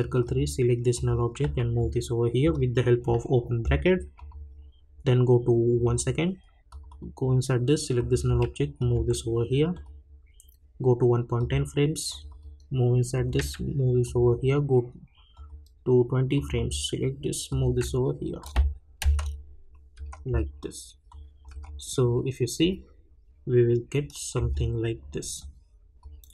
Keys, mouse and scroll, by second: 0.5 -, 0.9 click, 1.4 [, 4.2 click, 8.3 [, 8.8 click, 8.9 [, 9.7 click, 13.3 [, 14.0 click, 17.6 [, 18.4 click, 18.4 click, 19.0 space, 21.1 click, 21.5 space, 24.3 space, 25.4-26.3 drag.